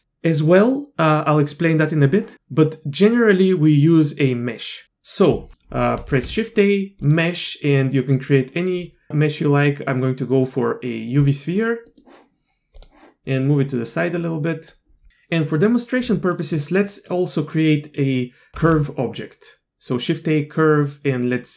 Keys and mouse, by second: 5.5 click, 6.1 shift+a, 11.9 click, 12.8 drag, 13.9 click, 18.5 shift+a.